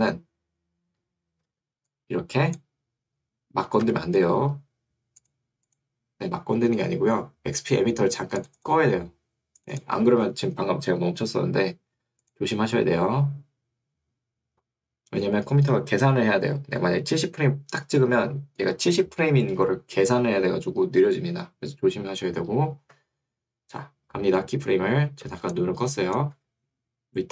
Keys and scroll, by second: 4.0 Escape, 26.4 Escape.